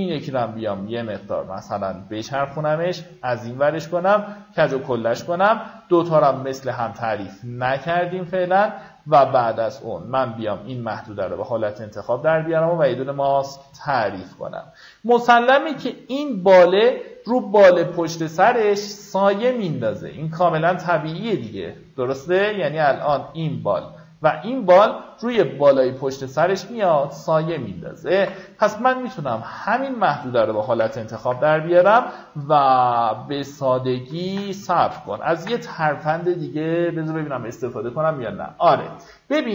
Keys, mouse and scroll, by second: 6.4 right click, 7.3 click, 9.3 ctrl+click, 10.5 click, 13.6-14.0 alt+scroll up 1, 18.5 click, 26.8 ctrl+click, 30.3 ctrl+alt+shift+n, 35.0 ctrl+d, 38.4-39.5 drag.